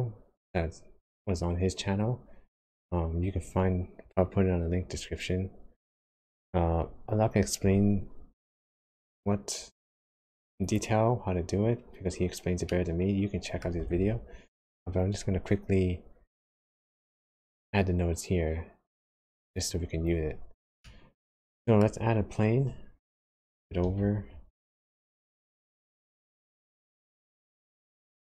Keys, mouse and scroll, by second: 9.1 click, 10.6 click, 12.6 middle click, 13.9 shift+a, 20.8 middle click, 23.8 g, 27.0 middle click.